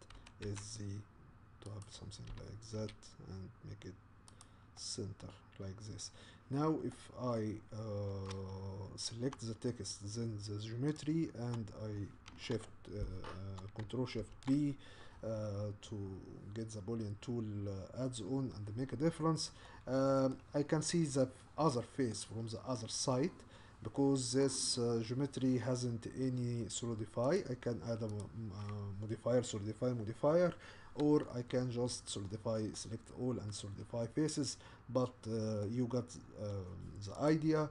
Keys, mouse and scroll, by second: 0.2 s, 2.3 g, 4.8-10.9 middle drag, 10.9 shift+click, 19.6-24.5 middle drag, 24.5 click, 32.7-37.3 middle drag, 37.3 click.